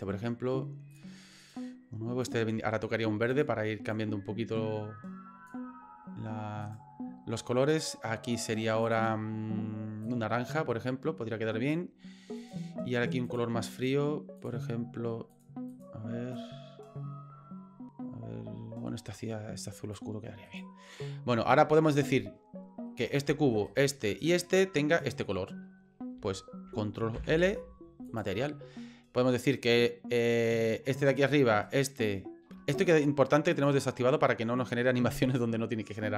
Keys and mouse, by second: 0.9 click, 1.4 right click, 2.2 click, 3.3 click, 6.7 right click, 7.8 click, 8.8 click, 12.4 right click, 13.3 click, 14.4 click, 15.3 click, 15.7 click, 20.5 right click, 23.1 right click, 23.7 shift+right click, 24.2 shift+right click, 25.0 shift+right click, 27.1 ctrl+l, 29.6 right click, 30.9 right click, 31.6 shift+right click, 33.5 click.